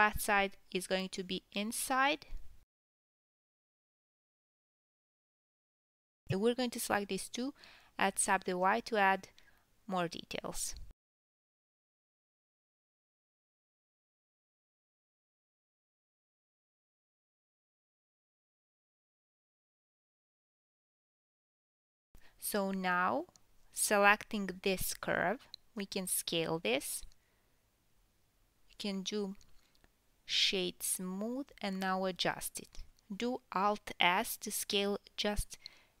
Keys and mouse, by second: 1.9 s, 2.5 click, 2.8-3.5 middle drag, 2.8 s, 3.5 click, 3.6-4.9 middle drag, 3.6 g, 4.9 drag, 5.1-6.4 middle drag, 6.4 shift+drag, 6.5-7.9 middle drag, 7.9-36.0 right drag, 8.0 g, 9.2 click, 9.4 g, 10.5 click, 10.8 shift+click, 11.2 drag, 13.8 g, 14.3 ctrl+z, 14.9-29.0 middle drag, 14.9 g, 15.5 r, 16.1 g, 16.7 r, 18.1 g, 19.3 Tab, 20.8-24.6 drag, 25.1 click, 27.0-27.5 drag, 27.5 s, 29.6 ctrl+2, 29.9 click, 29.9 middle click, 30.3 ctrl+2, 31.6 Tab, 32.3 KP_1, 34.2-34.9 alt+s, 34.9 s, 35.7 alt+s.